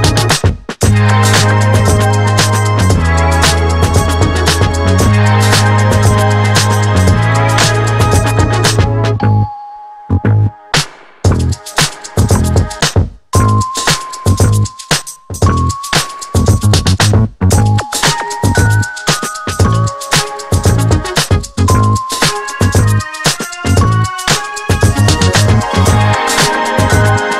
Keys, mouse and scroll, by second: 8.0-11.2 drag, 11.2-18.3 drag, 18.7 click, 21.0 click.